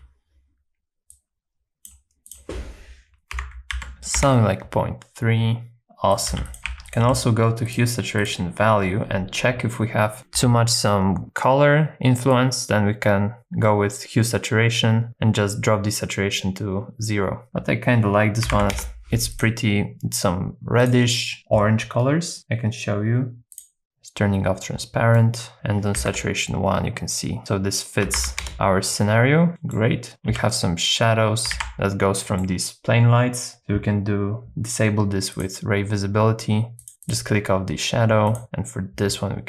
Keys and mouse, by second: 1.3 click, 2.3-4.2 drag, 6.1 click, 6.3 g, 6.7 shift+a, 8.2 click, 12.4 click, 17.4-18.7 drag, 19.3 click, 20.8 click, 23.5 click, 25.2 middle click, 25.5 click, 27.4-28.5 drag, 28.5 KP_0, 29.5 middle click, 30.3 h, 31.6 super+z, 32.2 middle click, 35.3 click, 36.8 click, 37.0 click.